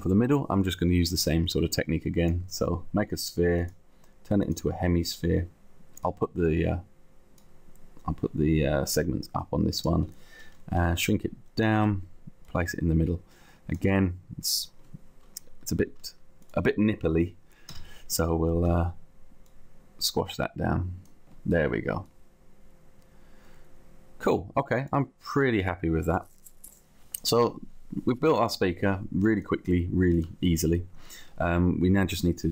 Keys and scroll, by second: 10.8 t, 11.8 space, 13.2 space, 17.7 c, 18.7 t, 20.4 t.